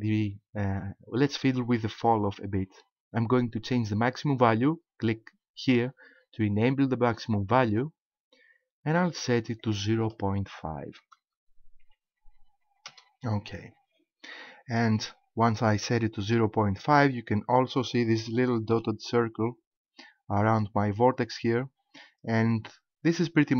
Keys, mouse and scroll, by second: 7.7 click, 9.6 click, 17.1-17.5 scroll up 2, 18.3 shift+middle click, 22.0 middle click.